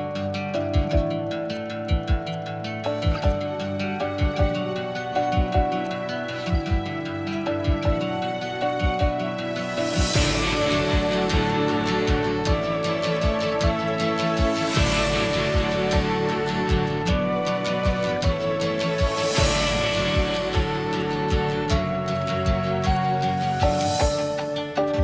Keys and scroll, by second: 8.0 Escape, 8.4 ctrl+z, 8.6 ctrl+z, 9.0 ctrl+z, 9.6 ctrl+z, 21.6 Delete, 22.5 Delete, 23.1 Delete, 24.1 Delete.